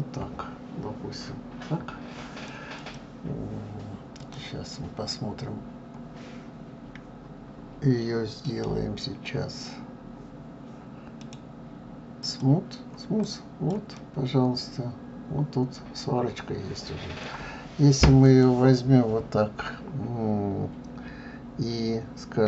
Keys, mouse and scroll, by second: 2.8 click, 4.1 click, 8.4-13.2 right drag, 13.2 click, 14.0-17.0 middle drag, 18.2 click.